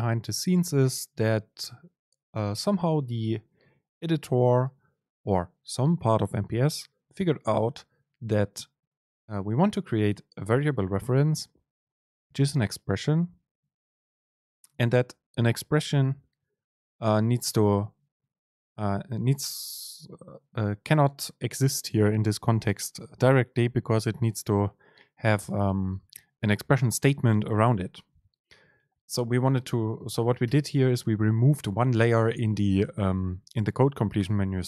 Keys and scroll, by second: 16.8 shift+Down, 29.0 BackSpace, 30.5 BackSpace.